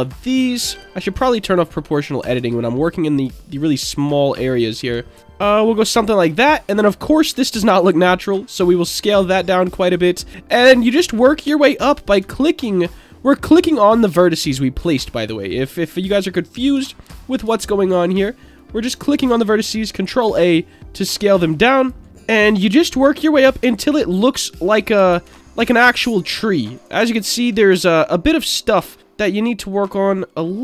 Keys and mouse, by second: 0.0 ctrl+click, 1.1 click, 1.9 click, 2.3 ctrl+a, 3.1 ctrl+click, 4.4 click, 4.9 ctrl+a, 5.4 ctrl+click, 7.3 ctrl+a, 9.7 ctrl+click, 10.4 click, 12.2 ctrl+a, 15.2 ctrl+click, 16.2 click, 17.0 shift+click, 17.9 shift+click, 18.5 shift+click, 20.0 ctrl+a, 21.8 ctrl+click, 22.6 ctrl+a, 23.8 click, 24.7 click, 25.1 ctrl+a, 25.9 click, 27.1 ctrl+a, 28.4 click, 29.0 ctrl+a, 30.5 click.